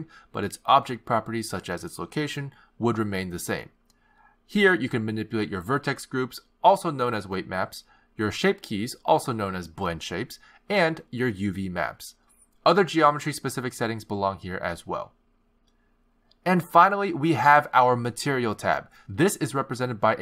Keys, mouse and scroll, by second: 1.3 click, 3.8 click, 4.2 x, 5.3 click, 7.4 click, 8.2 click, 9.5 click, 10.7 click, 12.0 click, 12.7 click, 18.3 click.